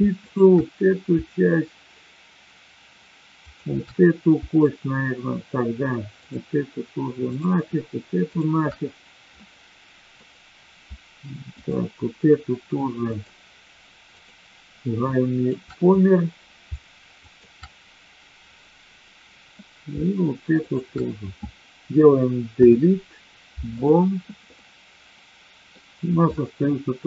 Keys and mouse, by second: 0.1 shift+click, 3.3 shift+click, 6.1 shift+click, 7.3 shift+click, 8.1 shift+click, 9.3 middle click, 11.5 shift+click, 13.1 shift+click, 14.0 shift+click, 15.0 shift+click, 17.1 shift+click, 22.5 Delete, 24.5-25.7 middle drag, 26.3 middle click.